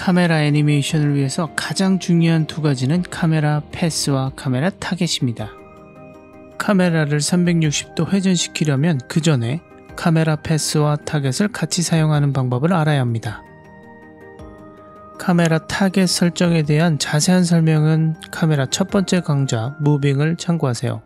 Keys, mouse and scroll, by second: 1.7 click, 6.2 ctrl+alt+q, 7.0-8.2 drag, 8.2-10.5 scroll up 3, 10.5-13.8 drag, 16.8 click.